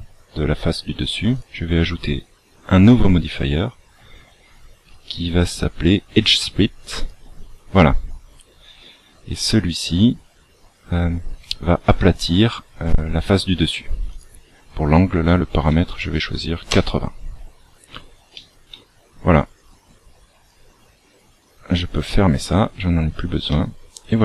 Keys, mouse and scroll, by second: 1.3 click, 14.1 click, 18.3 shift+middle click, 19.7 click, 21.9 click, 22.1 click, 23.5 middle click.